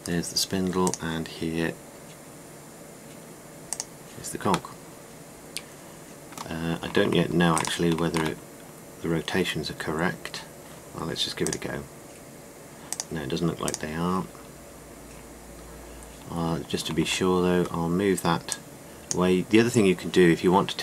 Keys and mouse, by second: 5.4-5.9 middle drag, 9.2 middle click, 14.9 middle click, 15.1-15.5 middle drag, 18.2-19.2 middle drag.